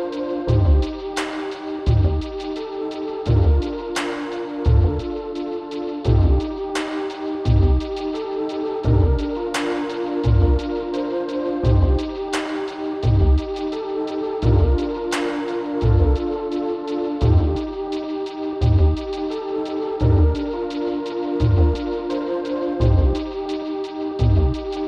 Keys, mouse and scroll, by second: 1.2 click, 3.5-5.2 drag, 5.2 KP_3, 7.2 a, 7.6 b, 13.7 b, 20.2-22.1 right drag, 22.7 x.